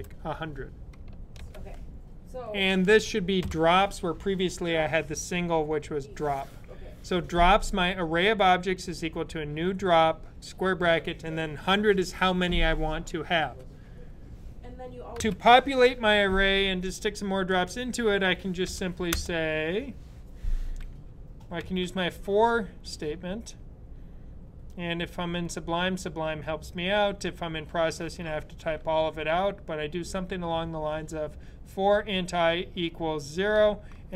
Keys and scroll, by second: 3.2 typing, 18.5 Right, 21.4 f.